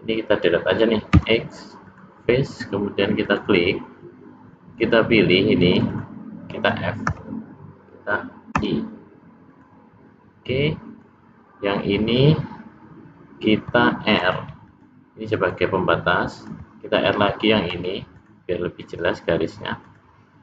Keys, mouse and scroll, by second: 1.1 x, 3.2 click, 3.4 click, 4.8 click, 5.8 click, 6.0 click, 7.2 f, 8.6 i, 10.6 middle click, 14.3 ctrl+r, 17.8 ctrl+r.